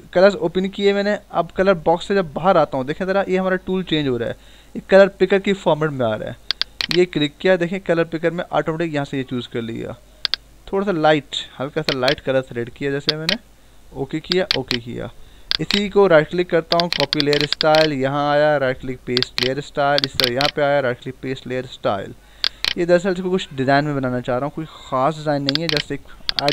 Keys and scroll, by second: 24.2 ctrl+-.